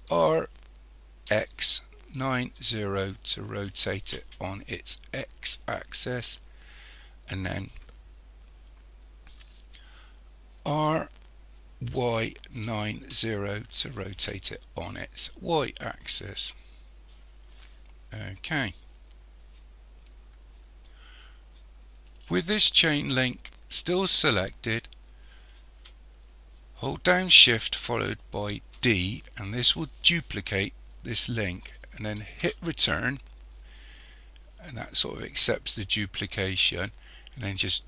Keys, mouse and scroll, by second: 0.2 r, 10.7 r, 28.8 shift+d, 37.1 click.